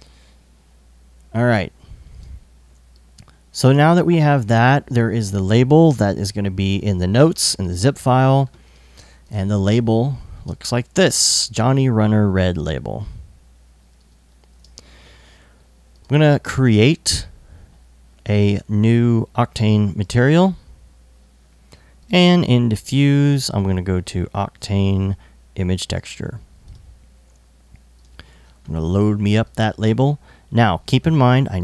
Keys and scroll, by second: 1.0 i, 10.0 space, 13.6 space, 14.2 super+Tab.